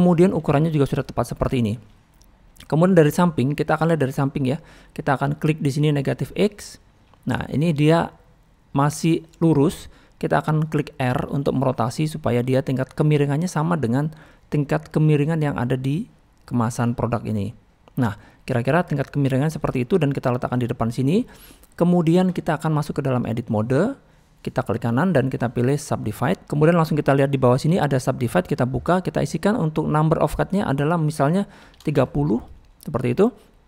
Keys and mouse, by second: 0.4 s, 1.4-1.7 middle drag, 2.1-2.7 middle drag, 3.2-4.5 middle drag, 5.5 middle click, 6.5 click, 13.7-14.6 drag, 17.2 click, 19.0-19.3 middle drag, 19.8 middle click, 20.3 middle click, 21.0 click, 21.4 middle click, 23.2-23.8 drag, 24.2 middle click, 26.4 click, 28.5 click, 29.4-32.0 drag.